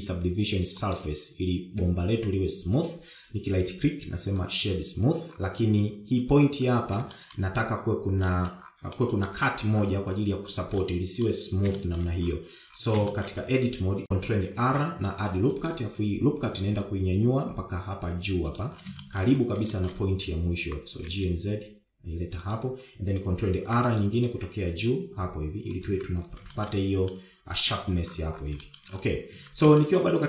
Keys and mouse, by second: 8.2 shift+middle click, 9.2 middle click, 9.9 middle click, 11.8-12.2 middle drag, 12.8 shift+middle drag, 14.1 shift+middle click, 14.4 Tab, 15.6 ctrl+r, 20.1 shift+middle click, 20.8 shift+middle click, 21.7 g, 24.6 ctrl+r, 27.0 Tab, 27.6 shift+middle click, 28.2-28.7 middle drag, 29.8 shift+middle click.